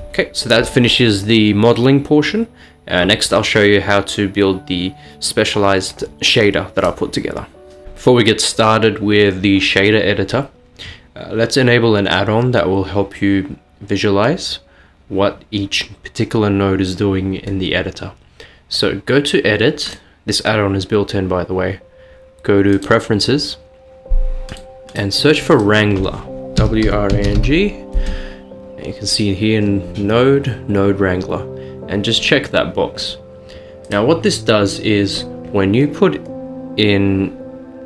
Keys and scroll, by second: 26.7-27.4 typing, 29.9-30.6 typing.